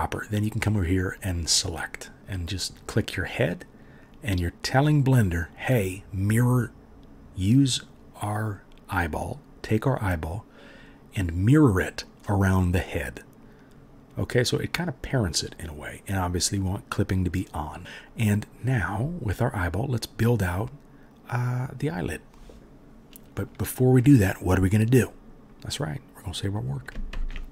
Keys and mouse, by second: 27.2 ctrl+s, 27.4 click.